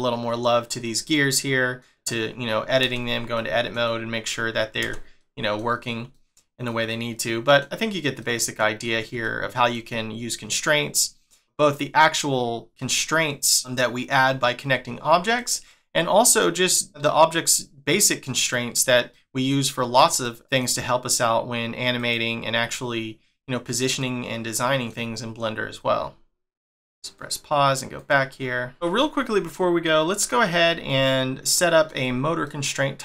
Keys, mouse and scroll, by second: 0.5 middle click, 1.3 middle click, 2.9 Tab, 3.4 middle click, 4.9 Tab, 5.2 middle click, 5.7 scroll down 1, 6.1 middle click, 7.9 scroll down 1, 8.3 middle click, 8.8 scroll up 2, 9.3 shift+middle click, 15.4 middle click, 17.0 click, 19.2 middle click, 20.3 middle click, 22.0 click, 24.0 middle click, 27.2 click, 27.9 click, 28.9 middle click, 29.7 scroll down 1, 30.8 shift+middle click.